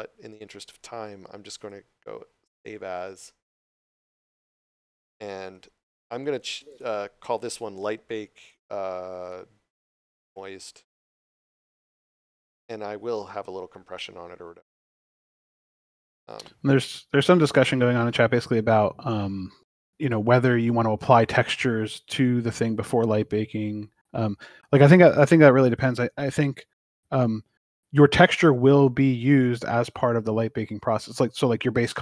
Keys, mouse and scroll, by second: 1.5 click, 27.4 click, 29.6 scroll up 1.